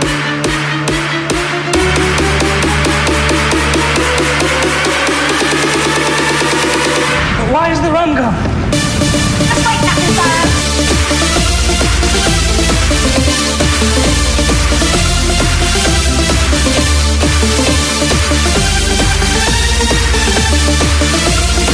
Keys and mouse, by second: 5.1-12.4 drag, 20.4-21.7 drag.